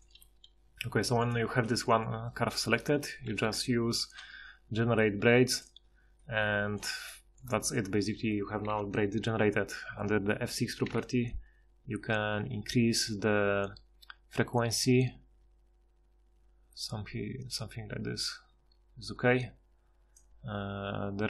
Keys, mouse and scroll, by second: 0.2 g, 3.3 ctrl+shift+h, 8.7 F6, 10.9 F6.